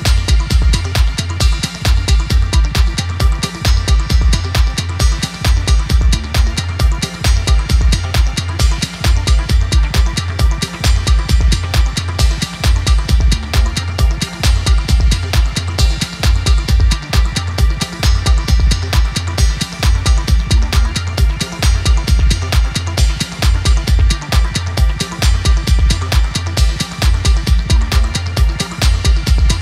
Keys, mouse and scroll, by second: 0.1-1.2 scroll up 3, 1.2 ctrl+r, 3.1 click, 3.8 scroll down 3, 4.0-5.2 middle drag, 5.2 scroll down 3, 5.3 middle click, 5.6 click, 6.0 click, 6.9 a, 8.8-10.5 drag, 10.6 scroll up 4, 10.8 middle click, 11.7 scroll down 5, 11.9 scroll up 2, 12.1-13.3 middle drag, 13.3 scroll up 2, 13.5 middle click, 14.1 click, 15.0 scroll down 1, 15.2 scroll up 2, 16.8 scroll down 2, 17.0-17.6 scroll up 2, 17.6 middle click, 18.3 click, 18.5 scroll down 4, 18.7 scroll up 2, 18.8-20.3 middle drag, 21.6 scroll up 2, 21.8 scroll down 2, 22.0 middle click, 22.6 scroll up 2, 22.8-23.1 scroll down 1, 23.1 ctrl+s, 23.5 scroll down 2, 23.7 scroll up 2, 24.4 middle click, 25.4 scroll up 2, 25.7-26.6 scroll down 1, 26.6 scroll down 2, 26.8 scroll up 2, 27.0-28.4 middle drag, 28.4 ctrl+s, 29.0 click, 29.3 ctrl+s.